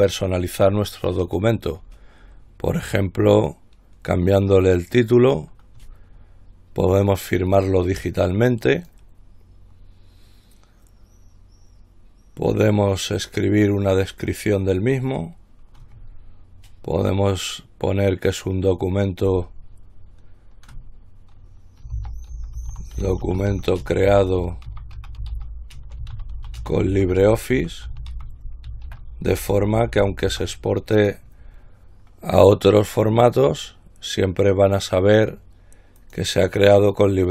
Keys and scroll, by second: 22.0-31.0 typing.